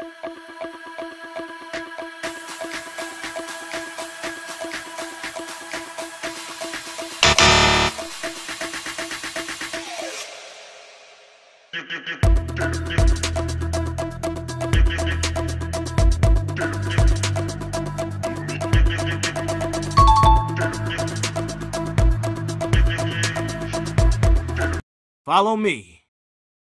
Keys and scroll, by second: 1.5 space, 4.4 Escape, 6.0 Escape, 7.3 Escape, 7.7 e, 8.2 space, 9.5 Escape, 10.7 c, 11.0 e, 12.4 n, 12.7 t, 18.8 Escape, 21.0 Escape.